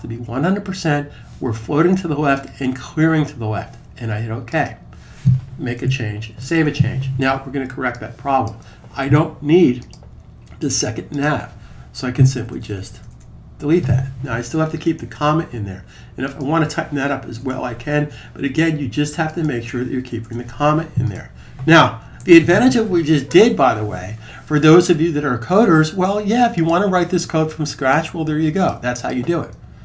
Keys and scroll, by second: 6.2 super+s, 22.0 super+s.